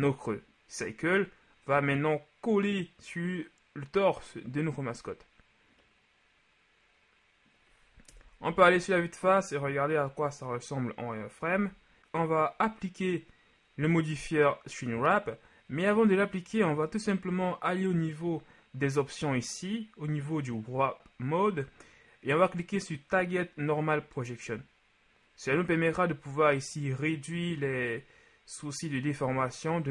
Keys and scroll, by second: 8.1 KP_1, 8.5 z, 11.6 z.